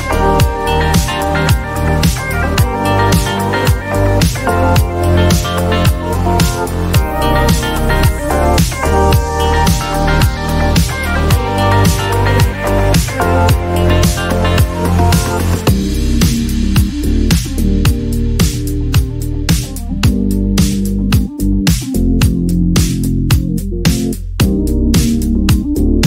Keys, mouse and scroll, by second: 1.6 click, 5.1-7.3 drag, 10.5 click, 13.2 click, 16.2 click, 18.6-19.8 drag, 20.6 click, 21.8 click, 21.9 click, 22.6 click.